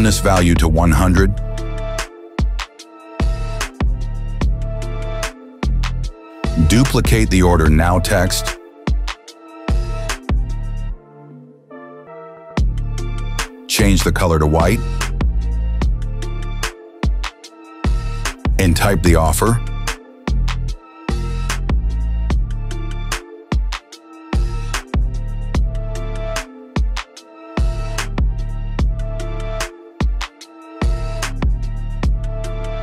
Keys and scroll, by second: 2.4 KP_0, 2.9 Return, 11.1 ctrl+d, 20.9-22.4 typing, 24.3-26.2 typing, 30.5 KP_0, 30.7 Return.